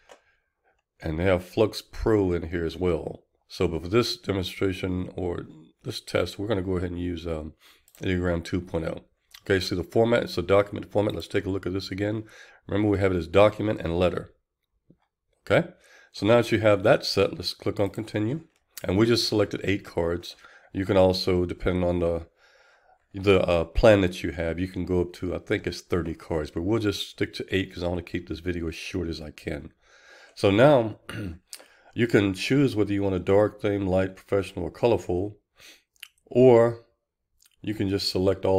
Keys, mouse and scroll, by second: 18.6-38.5 drag.